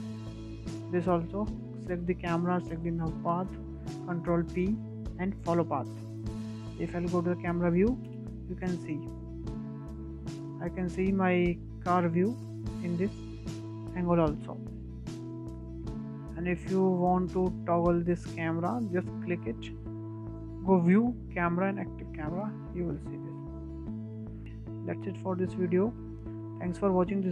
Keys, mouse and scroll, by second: 0.8 KP_0, 1.1-2.0 scroll down 12, 2.0-3.5 middle drag, 3.5 ctrl+click, 4.7 ctrl+p, 7.4 KP_0, 8.8 space, 14.4 space, 14.9-16.3 drag, 16.3 KP_0, 16.7-17.2 scroll down 3, 17.2 scroll up 4, 17.5-17.8 middle drag, 17.8-18.1 scroll up 4, 18.1-20.1 shift+middle drag, 20.1 click, 21.3-24.1 drag, 24.1 KP_0, 24.6 KP_0, 25.2-26.3 scroll down 1, 26.4 KP_0, 26.9-27.3 scroll down 9.